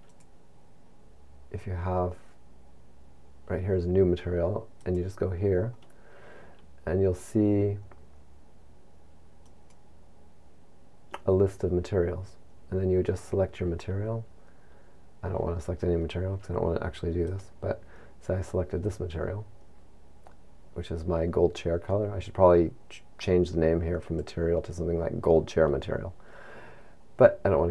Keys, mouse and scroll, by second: 0.6 click, 4.9 click, 10.1 click, 24.1 click.